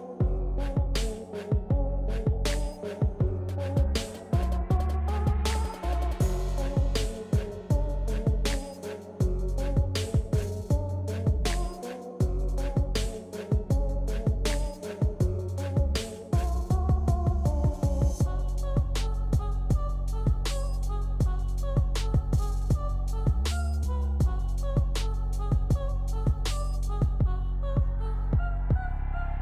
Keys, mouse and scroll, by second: 4.1 click, 6.7 click, 7.3 scroll down 1, 8.0 click, 11.0-14.0 drag, 14.7 click, 16.8 ctrl+z, 19.1 ctrl+z, 21.7 click.